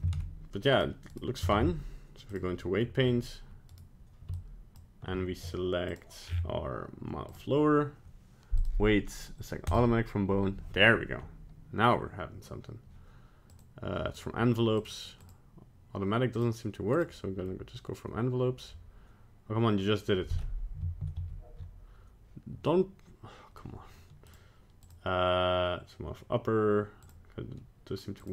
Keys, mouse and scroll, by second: 0.1 ctrl+Tab, 0.7 right click, 1.1 right click, 1.5 ctrl+Tab, 2.6 middle click, 3.0 scroll up 2, 3.7 right click, 4.3 shift+click, 5.9 click, 6.3-7.3 scroll down 9, 7.3 click, 8.6 click, 13.5 click, 14.7 click, 16.3 click, 21.2 ctrl+z, 24.3 click, 24.8 click, 27.0 click, 28.2 click.